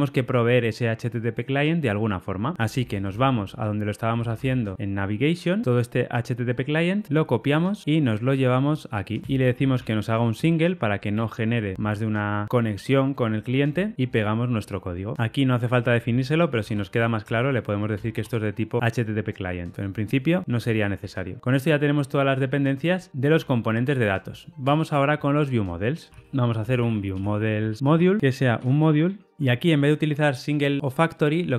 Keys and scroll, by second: 1.8 super+[, 1.8 ctrl+alt+Left, 7.8 super+[, 7.8 ctrl+alt+Left, 13.9 super+v, 17.9 Return, 20.6 super+z, 21.2 super+z.